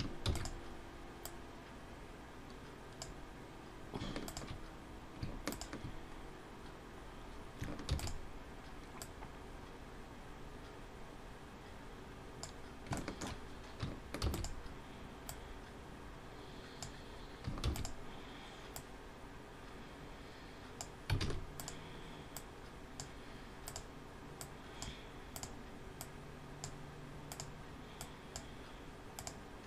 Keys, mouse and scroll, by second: 0.4 shift+d, 1.1 click, 4.1 shift+click, 5.5 shift+click, 5.9-6.3 scroll up 1, 6.7 scroll down 1, 7.7 shift+d, 8.8 click, 12.8 shift+middle click, 14.0 shift+d, 15.5 click, 17.7 shift+d, 19.0 click, 21.0 alt+a, 21.4 click, 22.1 click, 24.0 click, 24.3 click, 25.3 click, 26.0 click, 27.4 click, 28.1 click, 29.3 click.